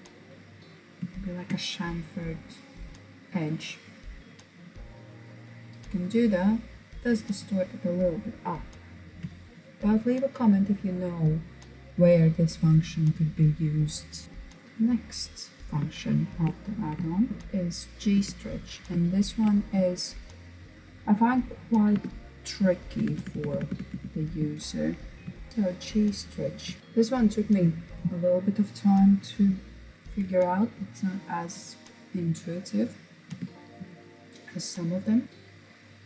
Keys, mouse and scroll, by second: 0.6-1.9 middle drag, 1.9-4.4 drag, 4.4-7.0 middle drag, 7.0-9.8 scroll down 1, 14.2 click, 15.1-16.8 shift+middle drag, 16.8 Tab, 17.3 Tab, 18.1-18.8 shift+middle drag, 18.8 click, 20.9 Tab, 22.0 BackSpace, 22.2 BackSpace, 24.8 shift+g, 25.3 s, 25.5-25.9 scroll up 2, 25.9-26.8 shift+middle drag, 26.8 click, 32.3 Tab, 33.3-35.1 scroll up 2, 35.1 click.